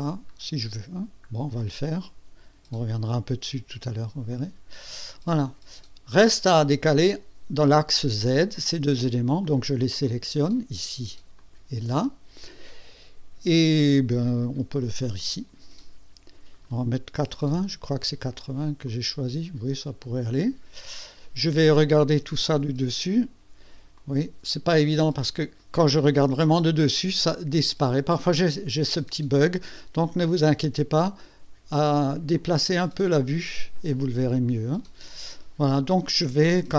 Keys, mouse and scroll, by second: 0.9 scroll down 1, 2.4-3.1 scroll down 2, 4.3 click, 5.3-6.8 drag, 9.4 click, 9.9 click, 10.0 click, 11.4 ctrl+click, 11.8 ctrl+click, 15.2 click, 15.9-16.6 scroll up 4, 17.2 KP_8, 17.6 KP_0, 18.8 click, 19.0-20.7 drag, 22.5 KP_2, 23.9-25.8 drag, 26.1 KP_2, 27.0 KP_2, 27.3 click, 28.0 click, 28.9 KP_2, 30.1-35.0 drag.